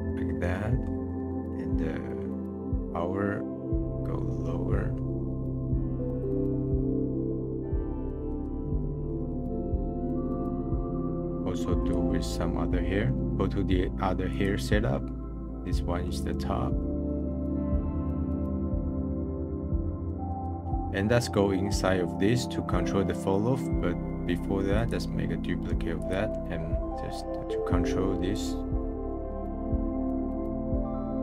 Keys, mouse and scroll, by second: 0.2-2.6 middle drag, 2.6-6.8 drag, 6.8-9.5 middle drag, 9.5-11.0 drag, 11.0-11.3 middle drag, 11.8-13.3 drag, 13.3-14.3 middle drag, 14.3 click, 14.9-15.9 scroll down 22, 15.9 middle click, 16.3-16.9 scroll up 14, 16.9 click, 16.9 ctrl+v, 17.0 click, 17.2 click, 17.3 click, 17.4 click, 17.6 middle click, 17.6-18.0 scroll up 4, 17.8 middle click, 17.9 middle click, 18.0 scroll down 2, 18.2 click, 18.8 middle click, 19.0 scroll down 1, 19.2-20.6 drag, 20.6 middle click, 20.6 scroll up 10, 24.7-26.1 drag, 26.4-26.7 scroll down 12, 26.9 middle click, 28.3-29.1 drag, 29.2-30.0 drag, 30.2 middle click, 30.9 click.